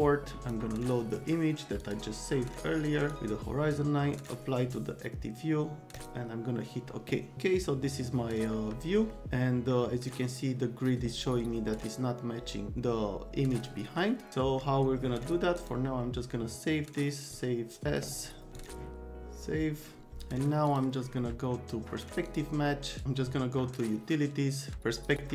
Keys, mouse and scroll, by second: 0.4 click, 1.8 click, 3.0 click, 4.2 click, 5.9 click, 7.3-8.4 middle drag, 9.1 right click, 14.0-14.6 right drag, 15.5 click, 17.3 click, 20.6 click, 22.2 click, 22.9 click, 24.7 click, 24.9 click.